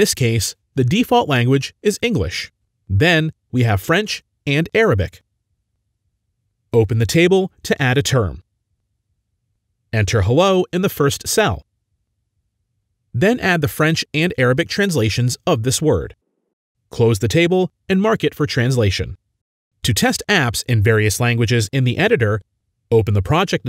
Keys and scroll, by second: 2.7-4.6 typing, 11.2-12.9 typing, 14.8 ctrl+c, 15.3 ctrl+v, 15.4 ctrl+c, 16.6 ctrl+v, 16.6 ctrl+c.